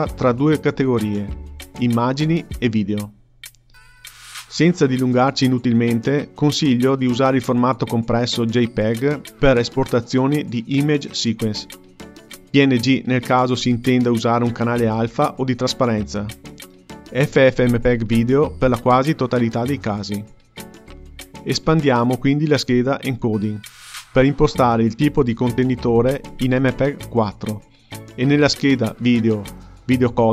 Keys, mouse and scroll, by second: 5.2-8.4 drag, 17.1-18.8 scroll down 2, 18.8-20.9 drag, 20.9-23.0 scroll down 1, 23.0-26.1 drag.